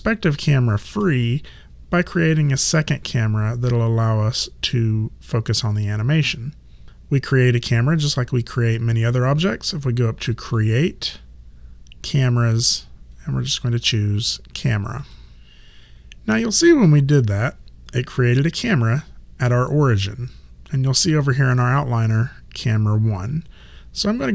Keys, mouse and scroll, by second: 10.5 click, 15.0 click.